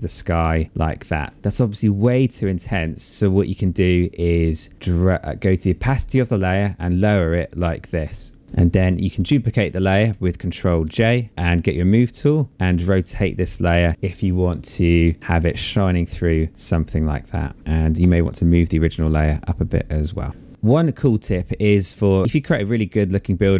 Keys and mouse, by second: 1.3 click, 5.6 click, 10.0 ctrl+j, 11.3 click, 12.4 click, 14.7 click, 17.6 Return, 17.6 KP_Enter, 17.6 click, 20.5 click, 20.5 space.